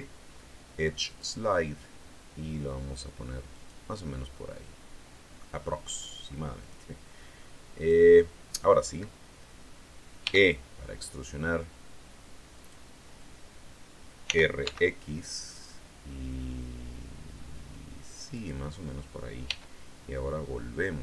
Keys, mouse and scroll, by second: 1.0 click, 3.5 click, 3.8-5.5 middle drag, 6.5 click, 7.7 right click, 8.1 middle click, 10.1 e, 12.5 click, 14.2 r, 14.5 x, 18.3 click, 19.4 e.